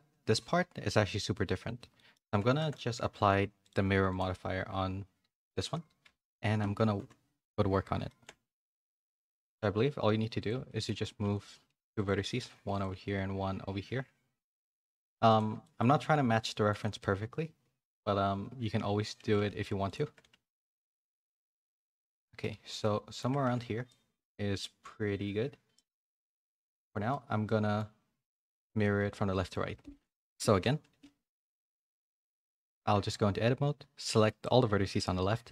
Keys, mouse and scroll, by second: 1.9 middle click, 2.2 z, 2.5 middle click, 4.1 click, 5.5 ctrl+a, 6.0 Tab, 6.3-12.9 typing, 8.0 shift+middle click, 15.6 middle click, 20.3 ctrl+r, 22.1 middle click, 22.5 z, 22.8 middle click, 23.2 Tab, 23.4 a, 23.6 a, 23.8 middle click, 25.8 middle click, 27.1 middle click, 28.6 middle click, 29.3 middle click, 29.6 Tab, 29.9-31.8 typing.